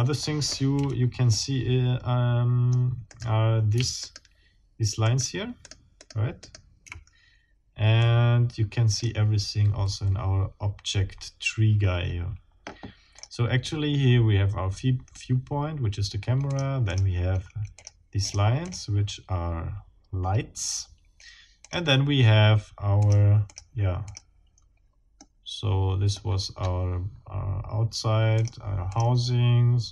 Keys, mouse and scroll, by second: 0.2 middle click, 1.3-2.9 middle drag, 1.3 KP_1, 3.1 middle click, 4.0 shift+middle click, 5.0 shift+middle click, 5.6 shift+right click, 6.0 shift+right click, 6.4 shift+right click, 8.0 click, 8.6 middle click, 8.8 click, 13.2 middle click, 16.5 middle click, 16.8 middle click, 17.8 middle click, 18.2 middle click, 18.6 middle click, 21.6 middle click, 21.9-23.0 drag, 23.0 middle click, 23.5 middle click, 24.0 middle click, 25.2-26.2 drag, 26.2-26.9 scroll up 2, 27.1 scroll down 1, 28.4 click, 28.9 click.